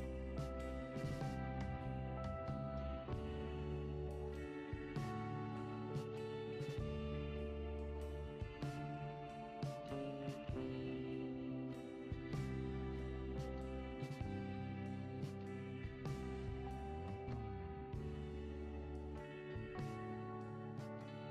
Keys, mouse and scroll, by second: 6.4 click, 7.1 alt+click, 9.1 alt+shift+click, 10.6 ctrl+b, 12.3 Tab, 15.0 drag, 15.9 click, 16.5 click, 17.0 click, 17.4 click, 18.2-21.3 drag.